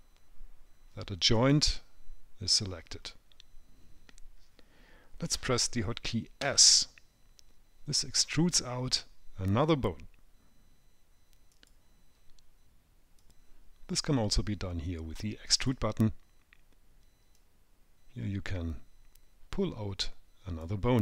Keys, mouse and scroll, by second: 1.7 click, 3.0-3.4 scroll down 4, 6.7 s, 15.9 click, 17.7 click.